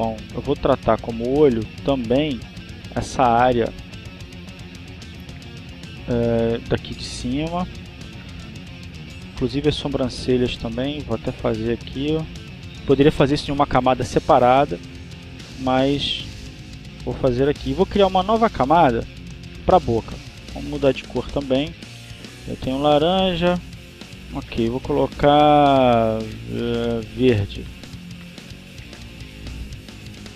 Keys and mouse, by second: 0.4 click, 2.0 click, 5.1 click, 6.2-8.2 drag, 9.2-10.2 drag, 15.6-17.9 drag, 18.9 click, 20.7 click, 27.5 click, 28.9 click.